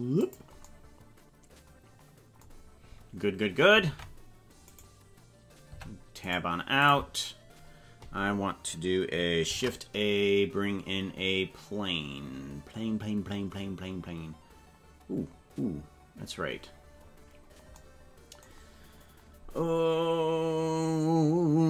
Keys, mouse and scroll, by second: 3.8 ctrl+Tab, 5.7 Tab, 6.3 right click, 6.8 click, 9.4 shift+a, 17.0-17.6 scroll down 8.